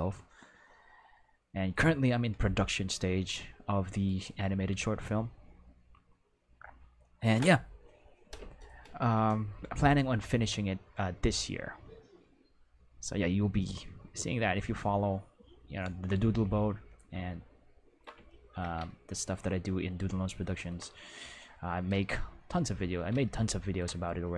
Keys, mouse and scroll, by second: 4.0 right click, 17.3 ctrl+middle click, 18.2 shift+middle click.